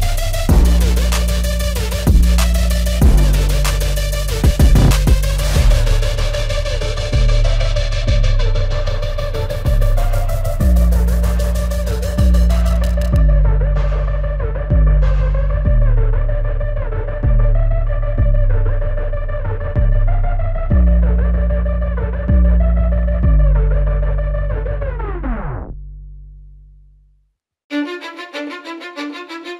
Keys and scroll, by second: 0.7 ctrl+alt+shift+e, 2.2 ctrl+alt+z.